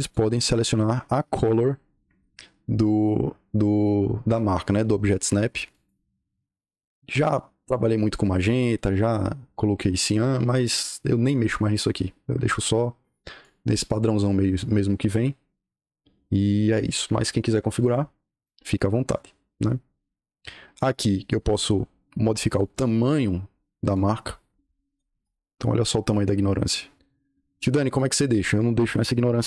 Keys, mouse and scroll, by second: 5.6 click, 10.6 click, 13.1 click, 22.5-23.1 drag, 23.8 click, 24.9 l, 25.1 Return, 28.7 Escape, 29.0-29.4 typing.